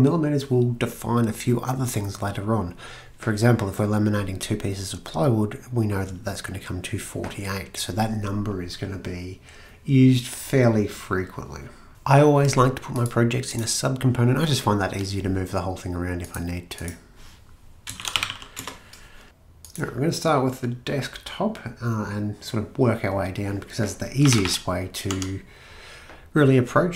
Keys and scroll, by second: 17.8-18.8 typing, 20.4 typing, 24.0-25.6 typing.